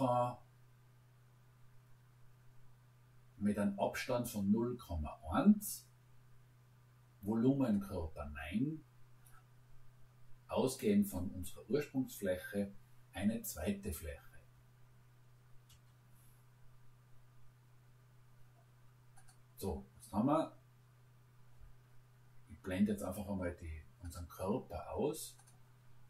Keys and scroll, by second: 15.7 Return.